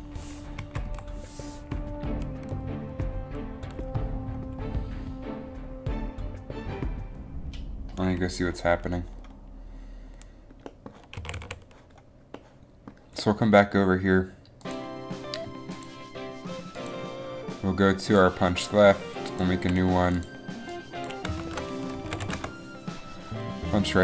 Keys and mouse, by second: 0.8 Left, 1.0 Right, 9.6 Left, 9.6 Right, 11.3 a, 11.5 a.